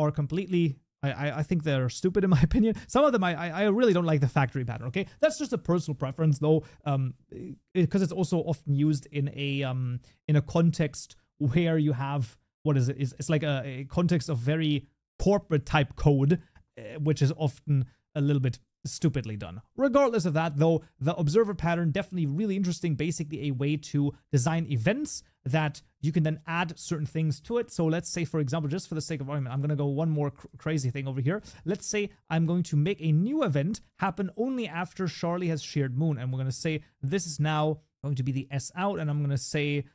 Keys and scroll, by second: 3.5 ctrl+s, 32.5 ctrl+c, 32.6 ctrl+v, 38.3 Tab.